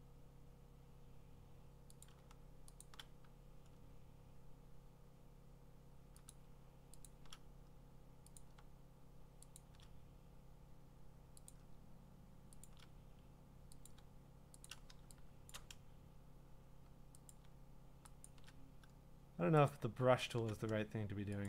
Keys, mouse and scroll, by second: 2.0 click, 2.8 shift+click, 6.3 click, 7.1 shift+click, 8.4 click, 9.6 shift+click, 11.5 click, 12.7 shift+click, 13.9 click, 14.7 shift+click, 15.5 click, 15.5 shift+click, 17.3 click, 18.3 shift+click, 19.7 click, 20.3 shift+click.